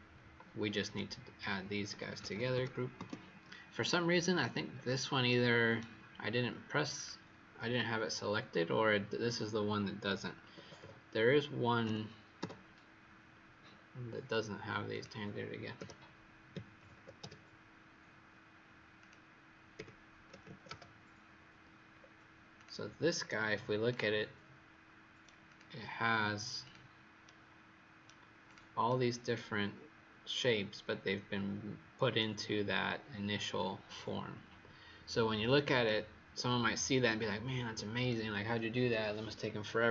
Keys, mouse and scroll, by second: 0.9 right click, 1.8 g, 2.9 Return, 2.9 typing, 4.7-5.2 scroll down 2, 5.2 right click, 6.9 click, 10.3 KP_1, 10.6 KP_0, 10.8 KP_0, 11.8 ', 12.3 Return, 13.6-14.9 scroll down 2, 14.9 click, 15.7 KP_Subtract, 16.4 KP_2, 16.7 KP_0, 16.9 KP_0, 18.9 click, 19.7 KP_Subtract, 20.2 KP_3, 20.4 KP_0, 21.9-22.5 scroll down 1, 22.5 click, 22.5-22.9 scroll down 1, 25.4 click, 27.2 right click, 28.4 click, 28.8 right click, 33.0-33.8 scroll up 1, 35.1-35.8 scroll down 1, 35.8 right click.